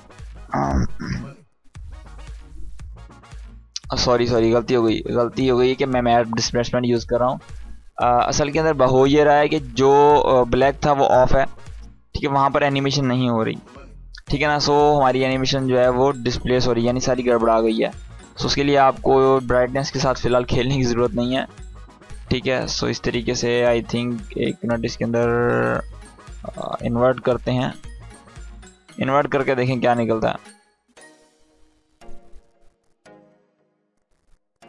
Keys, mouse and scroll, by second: 3.2 space, 4.5 click, 16.9-17.5 drag, 21.6-22.8 drag.